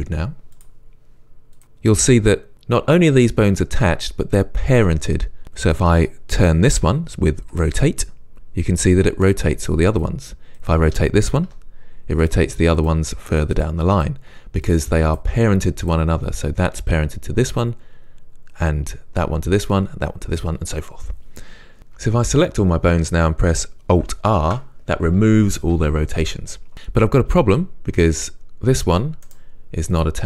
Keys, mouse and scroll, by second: 0.6-5.8 drag, 7.5 r, 10.1 click, 10.6 click, 11.5 r, 12.8 click, 13.2 r, 14.0 click, 14.3 r, 15.1 click, 15.4 r, 16.1 click, 22.0 a, 24.4 alt+r, 26.7 click, 28.0 g, 29.4 right click, 30.0 click.